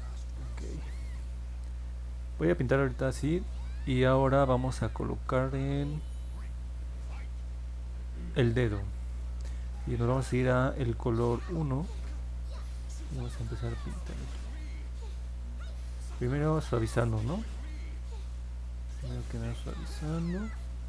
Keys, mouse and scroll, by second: 14.0 click, 14.3 click, 15.6 click, 16.0 click, 16.6 click, 17.6 click, 18.5 click, 19.4 click, 20.0 click, 20.4 click.